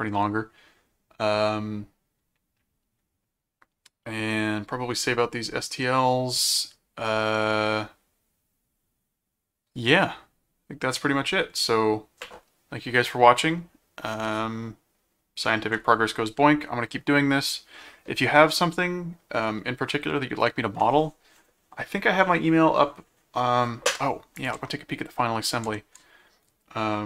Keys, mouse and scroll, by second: 24.4 ctrl+click, 24.9 ctrl+Tab, 25.6 ctrl+Tab.